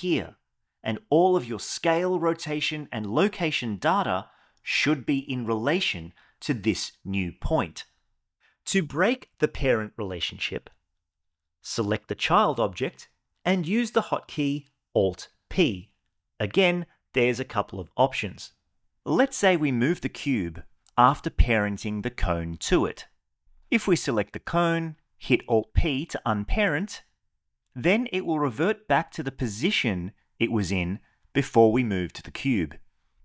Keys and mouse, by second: 11.3 click, 13.8 alt+p, 19.7 click, 20.8 g, 21.3 x, 24.9 click, 26.0 alt+p.